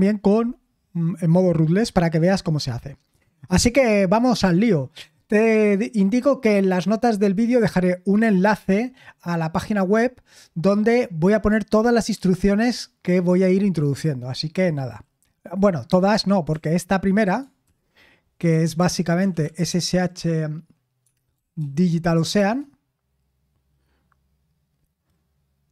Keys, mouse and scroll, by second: 16.5 typing, 17.6 super+l, 18.6 super+l, 19.1-22.1 typing, 22.3 Return.